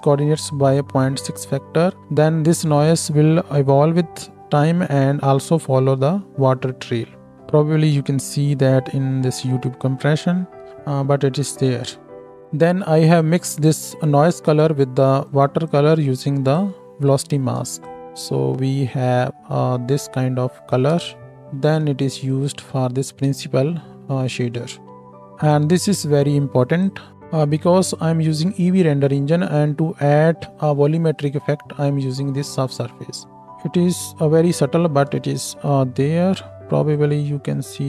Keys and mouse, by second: 6.3 space, 10.7 space, 17.9-22.4 ctrl+shift+middle drag, 21.1 space, 22.4 ctrl+shift+click, 22.6-25.5 ctrl+shift+middle drag, 25.5-27.1 drag.